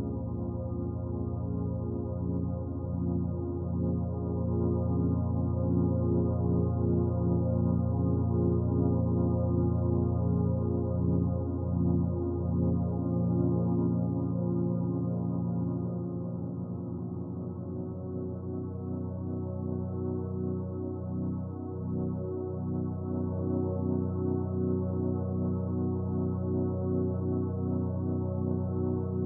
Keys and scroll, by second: 16.2 ctrl+j.